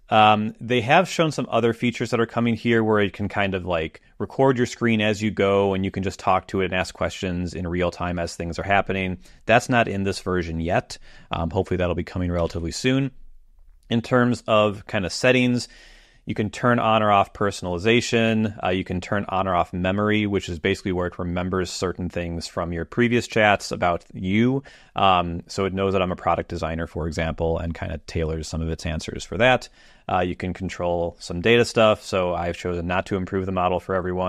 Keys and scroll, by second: 12.3 super+,.